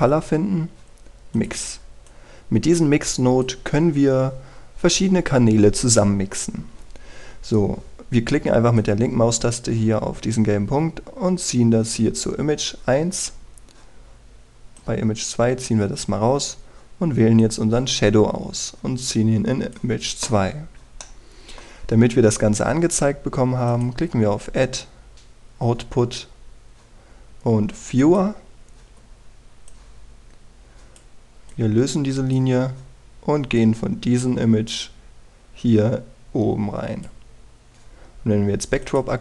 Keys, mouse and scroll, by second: 2.0-4.4 drag, 4.5-6.0 scroll up 1, 9.4-21.0 drag, 21.0-21.4 scroll down 1, 21.7 middle click, 24.4 click, 29.4-30.4 scroll down 1, 30.4-38.3 drag, 38.3-39.2 scroll up 1.